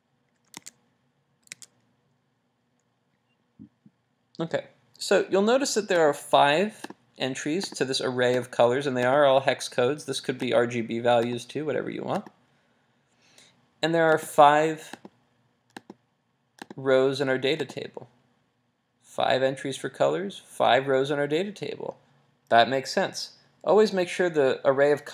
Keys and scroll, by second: 1.6 super+Tab.